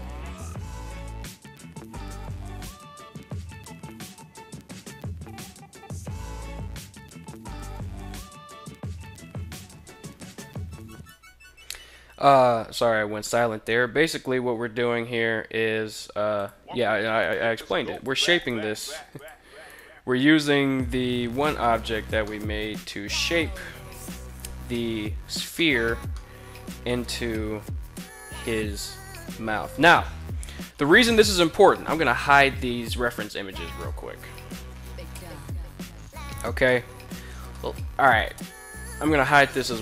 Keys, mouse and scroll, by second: 0.1 right click, 0.7 g, 1.7 click, 2.1 right click, 2.2 z, 2.7 shift+right click, 3.1 g, 4.1 click, 4.2 middle click, 4.7 KP_3, 5.6 right click, 5.7 shift+right click, 6.0 g, 6.9 click, 7.1 shift+right click, 7.7 g, 8.0 right click, 8.2 shift+right click, 8.6 g, 9.3 click, 10.4 right click, 11.6 z, 13.3 g, 15.9 click, 16.7 right click, 16.9 g, 17.5 click, 17.9 right click, 18.1 g, 18.7 click, 19.1 right click, 19.4 g, 19.7 click, 20.4 ctrl+z, 20.6 ctrl+z, 21.1 ctrl+z, 21.7 middle click, 22.5 middle click, 23.5 KP_1, 25.0 middle click, 25.4 Tab, 25.7-29.3 middle drag, 30.4 KP_1, 31.6 right click, 33.2 middle drag, 33.7 shift+right click, 34.6 h, 36.1 middle drag, 37.0-37.3 middle drag, 37.8 right click, 38.7 h, 39.2-39.6 middle drag.